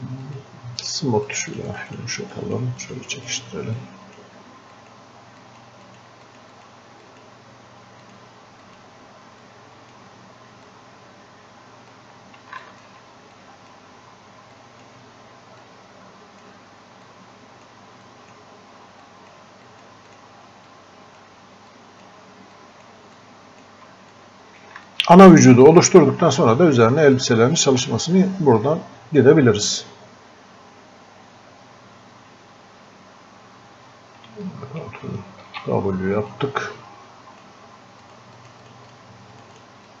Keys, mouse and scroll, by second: 0.3 shift+click, 2.4-12.6 drag, 13.4-22.6 drag, 23.5-24.9 shift+drag, 25.8 shift+click, 26.4 scroll up 1, 27.5 click, 28.0 scroll up 1, 30.5 scroll down 1, 34.3-35.5 ctrl+scroll down 1, 35.5 ctrl+w, 36.3-40.0 drag.